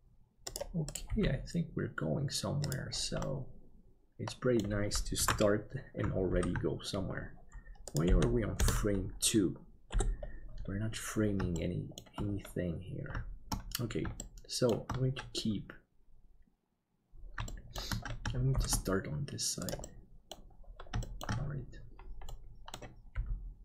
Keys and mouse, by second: 1.0 g, 3.3-4.6 middle drag, 6.4 ctrl+s, 9.9 KP_7, 11.6 shift+middle click, 14.2 shift+middle click, 17.5 shift+middle click, 18.5 shift+d, 19.9 middle click, 21.0 shift+middle click, 22.3 middle click, 23.1 g.